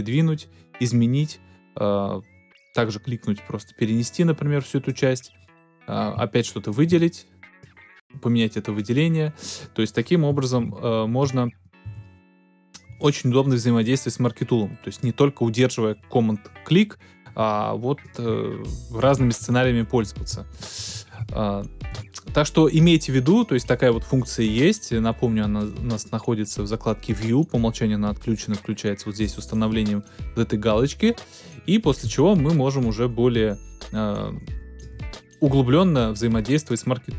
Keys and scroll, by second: 10.5 super+Down, 11.8 super+Down, 19.0 super+z, 20.7 shift+super+z.